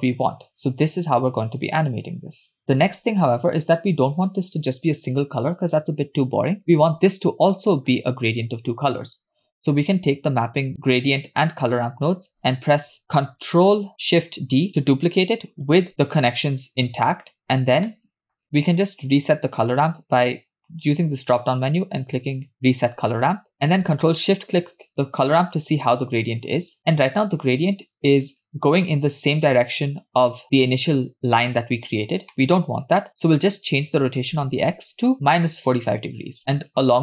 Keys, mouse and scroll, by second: 8.7-9.0 scroll down 2, 9.9-11.7 drag, 13.0 ctrl+d, 13.9 ctrl+d, 15.8 ctrl+shift+d, 15.9 middle click, 17.4 click, 17.9 middle click, 18.4-18.9 scroll up 2, 18.9 click, 19.6-22.9 drag, 24.2 ctrl+shift+click, 32.3 middle click, 33.0-33.5 scroll up 2, 33.9-35.7 drag.